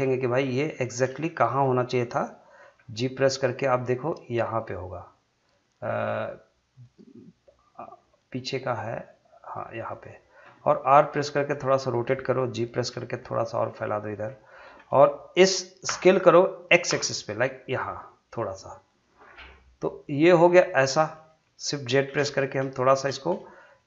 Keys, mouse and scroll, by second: 1.3 shift+middle click, 2.6 g, 9.9 click, 10.9 r, 12.1 click, 12.9 g, 14.1 click, 15.9 s, 17.1 x, 18.9 click, 19.2 scroll down 1, 19.5 middle click, 20.7 scroll up 1, 20.9 middle click, 22.1 shift+z, 22.3 scroll up 1, 22.8 shift+middle click, 23.1 middle click.